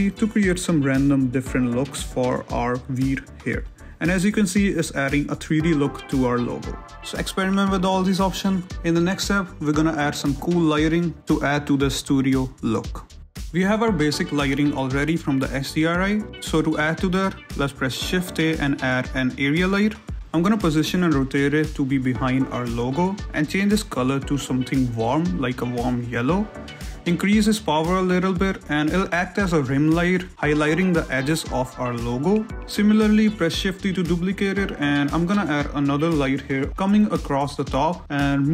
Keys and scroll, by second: 6.0 ctrl+z, 7.2 z, 12.9 ctrl+z, 15.5 `, 18.3 shift+z, 18.6 shift+a, 20.9-23.0 typing, 24.3 g, 26.6 shift+z, 26.9 r, 27.5 g, 28.6-32.1 typing, 28.7 Return, 33.7 z, 34.1 shift+d, 34.4 r, 36.0 s, 36.3 g, 37.5 5, 37.7 0, 37.8 Return.